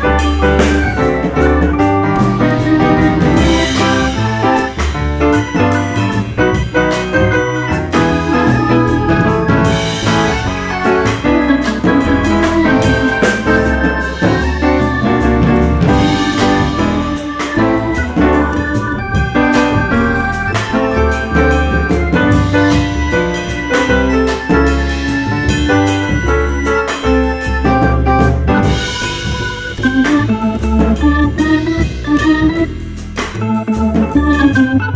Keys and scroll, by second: 2.4 0, 2.5 Return, 3.9 F4, 4.6 F4, 5.4 1, 6.2 ctrl+shift+e, 6.6 F4, 7.8 4, 10.3 F3, 11.7 ctrl+z, 15.2 F3, 17.2 Delete, 19.2 F4, 20.9 F4, 22.3 2, 25.0 ctrl+r, 27.3 F4, 28.2 ctrl+c, 30.1 2, 31.5 1, 32.4 ctrl+shift+e, 32.6 1, 32.8 F4.